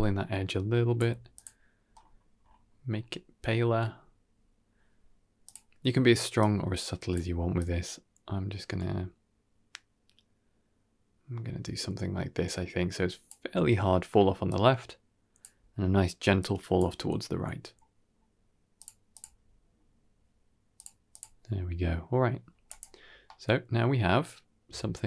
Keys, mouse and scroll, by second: 1.2 click, 5.3 click, 6.3-7.0 drag, 7.5-13.1 drag, 14.3 click, 16.3 click, 18.0-18.6 scroll down 1, 18.6 click, 18.6 scroll down 1, 19.0 click, 20.6 click, 21.0 click, 22.6 click, 22.9-24.6 scroll down 3, 23.1-24.6 middle drag, 24.8 shift+middle drag.